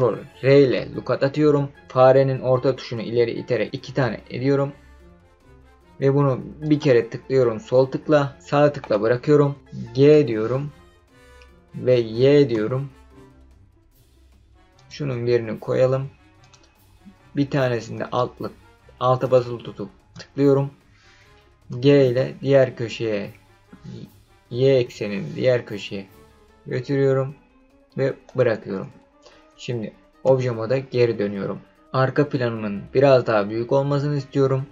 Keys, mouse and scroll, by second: 0.5 ctrl+r, 8.8 right click, 10.1 g, 12.5 y, 14.7 click, 16.4 click, 19.2 alt+click, 21.7 g, 24.7 y, 28.2 click, 30.2 Tab.